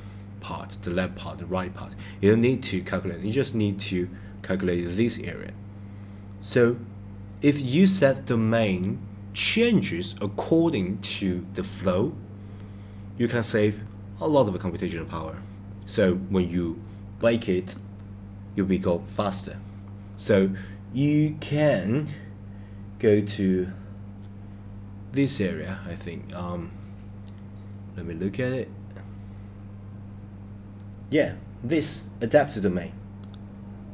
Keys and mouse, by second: 33.2-33.9 drag.